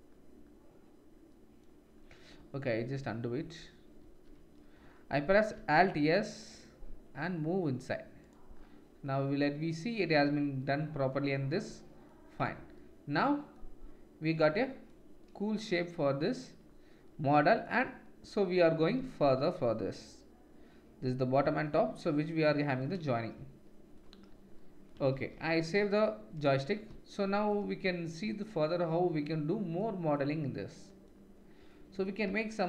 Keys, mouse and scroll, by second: 2.8 ctrl+z, 3.4 ctrl+z, 4.3 ctrl+z, 5.5 alt+s, 9.0-13.2 drag, 11.1 middle click, 11.1 right click, 12.4 Tab, 19.0 ctrl+s, 24.0-32.6 drag, 25.2 ctrl+s.